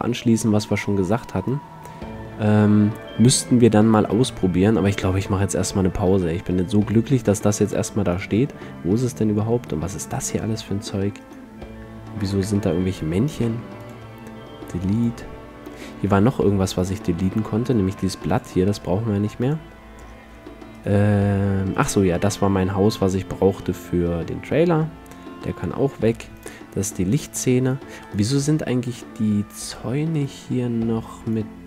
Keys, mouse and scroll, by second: 1.5-3.1 middle drag, 3.4-7.2 middle drag, 5.4 a, 7.2-10.0 drag, 10.2-11.4 drag, 12.0-13.0 drag, 12.8 z, 13.0 b, 13.6 x, 15.1 click, 15.7 a, 16.2 a, 16.8-17.8 drag, 18.1 x, 18.7 click, 19.6-21.9 drag, 22.6-23.6 middle drag, 23.0 x, 23.6-26.2 drag, 26.5-27.8 drag, 28.4-31.6 drag.